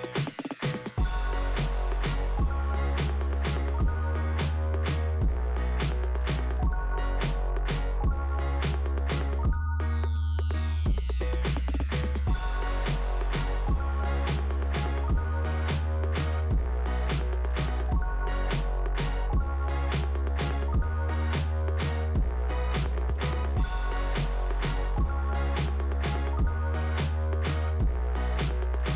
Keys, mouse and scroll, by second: 10.5 click, 13.0-13.4 scroll down 2, 14.7-15.2 scroll down 2, 19.5 click.